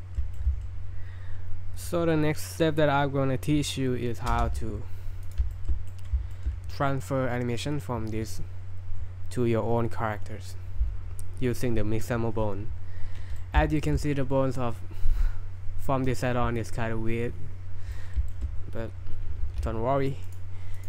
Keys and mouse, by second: 0.3 middle click, 4.3 space, 5.5 shift+middle drag, 5.9 drag, 6.3 shift+middle click, 13.4 middle drag, 13.8 shift+middle drag, 17.9 middle drag, 18.3 shift+middle click.